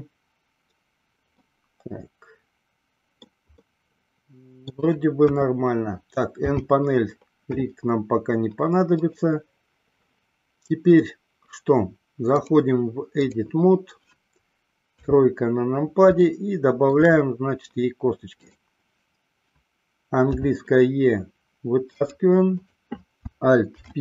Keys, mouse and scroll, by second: 1.6-3.4 middle drag, 3.8-4.9 middle drag, 5.6 KP_1, 6.6 n, 12.4-13.7 drag, 15.2 KP_3, 16.4 shift+middle click, 18.6 click, 20.6 e, 22.8 click, 23.9 alt+p.